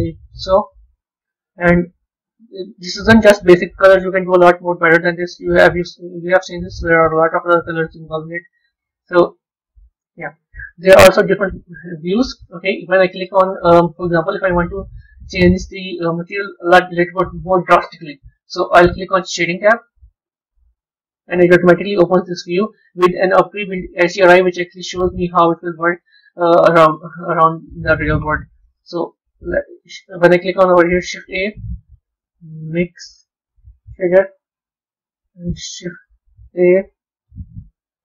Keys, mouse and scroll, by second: 1.7 z, 20.6 click, 22.2-26.3 middle drag, 26.3 click.